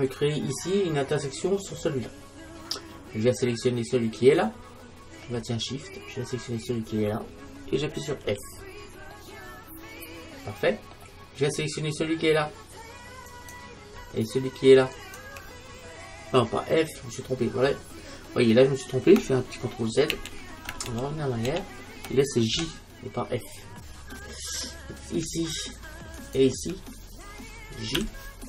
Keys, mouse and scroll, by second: 1.4 scroll up 1, 2.0-3.8 middle drag, 3.9-5.8 right drag, 6.5-8.3 right drag, 8.3 f, 9.2 middle click, 13.3-16.9 right drag, 18.1-20.7 middle drag, 20.2 ctrl+z, 20.9 ctrl+z, 21.5 ctrl+z, 22.6 j, 24.4-28.0 right drag, 28.0 j.